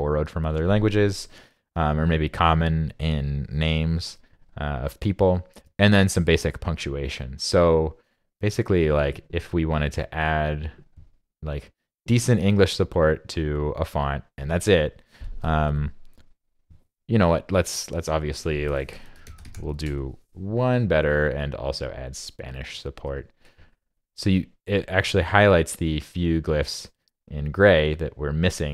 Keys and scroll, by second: 18.7 super+f.